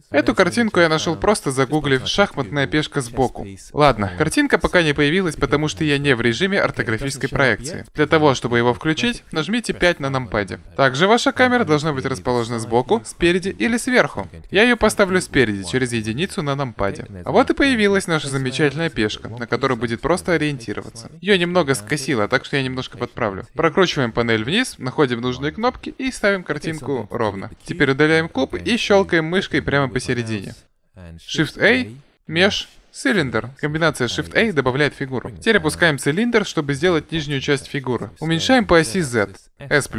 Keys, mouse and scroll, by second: 0.0 Return, 9.2 KP_5, 10.2 KP_5, 15.3 KP_1, 20.5-21.8 drag, 23.5-26.4 drag, 28.0 Delete, 30.1-31.8 drag, 31.8 shift+a, 34.9-36.5 drag, 38.1 s.